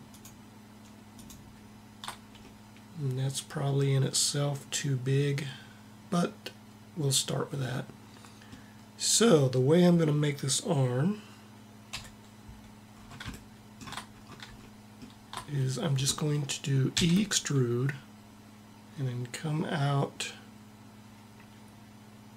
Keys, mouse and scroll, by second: 2.2 click, 11.7 KP_1, 12.6 middle click, 13.9 middle click, 16.7 e.